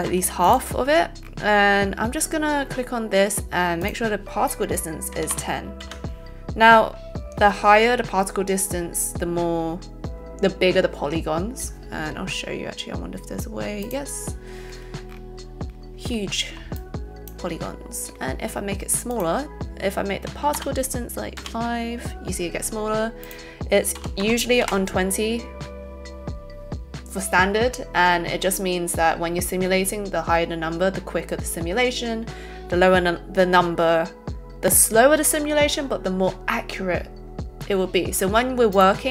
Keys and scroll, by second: 0.1 a, 5.1 KP_1, 5.3 KP_0, 5.7 Return, 21.3 Return, 24.0 KP_2, 24.1 KP_0, 24.6 Return, 24.6 '.